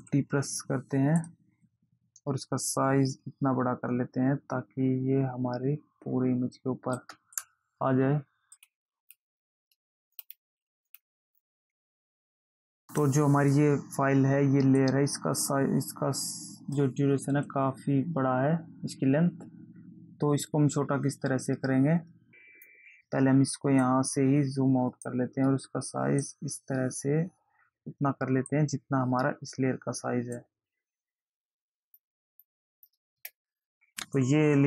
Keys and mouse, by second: 1.6 click, 3.1 click, 11.5 click, 15.1 click, 24.1 click, 26.6 click, 30.7 click, 32.6 click.